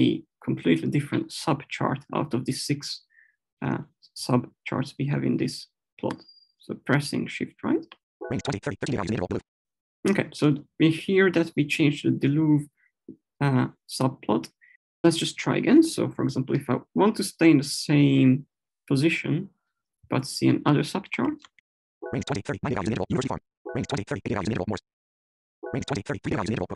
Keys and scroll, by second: 7.7 Right, 22.0 Right, 23.6 Right, 25.6 Right.